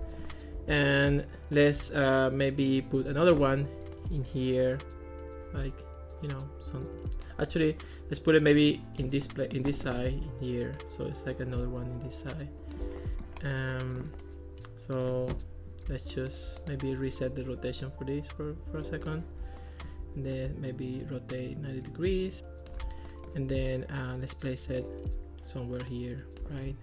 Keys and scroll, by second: 3.4 super+d, 11.7 super+z.